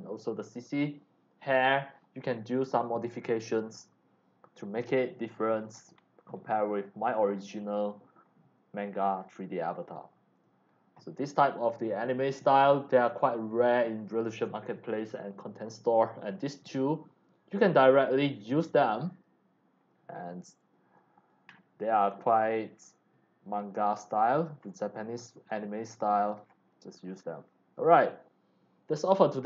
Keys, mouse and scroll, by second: 1.9 scroll up 1, 2.5 click, 3.8 click, 4.9 x, 5.0-5.7 drag, 5.4 c, 5.9-6.6 scroll down 3, 7.1 middle click, 7.3 c, 7.4-8.9 drag, 9.1 middle click, 9.7 x, 9.8-10.4 drag, 10.1 c, 15.7-16.2 drag, 17.8 scroll down 1, 19.1 click, 19.7-20.2 scroll up 2, 20.6 x, 20.7 click, 21.5 scroll up 1, 22.1 c, 22.2-24.3 drag, 24.6 scroll up 1, 25.4 click, 25.4 x, 25.9 c, 26.4 scroll down 1, 26.9 c, 27.0 click, 29.4 click.